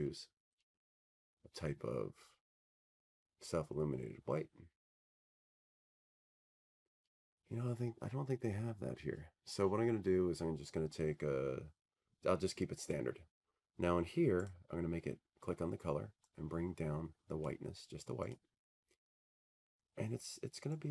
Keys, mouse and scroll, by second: 0.5 click, 1.9 click, 1.9 click, 4.2 click, 5.5-6.0 scroll, 6.3-6.8 scroll, 6.8-8.6 scroll, 8.6-9.0 scroll, 12.5-14.6 scroll, 14.8-16.9 scroll, 15.2-17.6 middle drag, 18.5-20.9 drag.